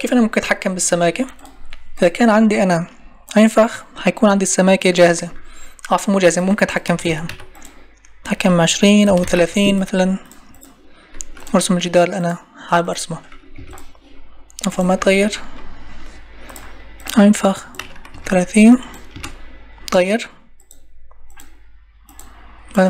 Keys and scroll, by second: 13.5 Escape, 19.1 Return.